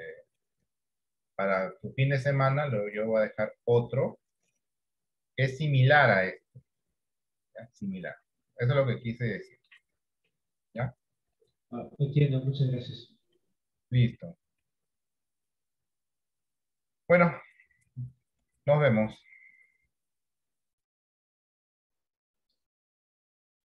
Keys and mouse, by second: 4.1-8.1 middle drag, 9.1 middle click, 10.6 shift+middle click, 12.6 middle click.